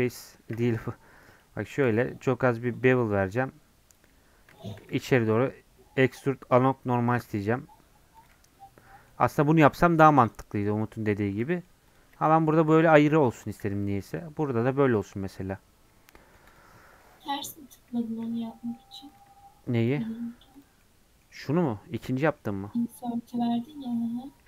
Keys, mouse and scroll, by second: 0.4 ctrl+r, 4.2 scroll up 1, 4.6-7.1 shift+middle drag, 7.1 alt+e, 8.3 Tab, 8.5 scroll down 2, 8.8-10.2 middle drag, 10.2 click, 10.5 middle click, 11.1 scroll down 1, 11.4 middle click, 11.9 click, 12.3 g, 13.2 click, 13.6 g, 14.9 click, 15.2 middle click, 15.9 scroll down 2, 16.1-17.3 middle drag, 17.3-18.0 scroll up 2, 18.0-19.1 shift+middle drag, 19.1-20.8 drag, 20.8-22.4 middle drag, 22.4-23.3 scroll up 3, 23.3-23.7 scroll down 2, 23.7 middle click, 24.2 scroll up 2.